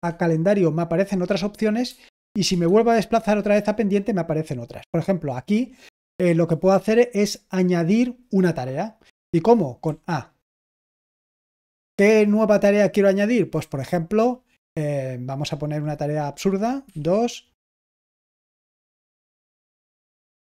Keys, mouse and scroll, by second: 2.0 shift+Tab, 2.6 shift+Tab, 3.2 Tab, 9.8 a.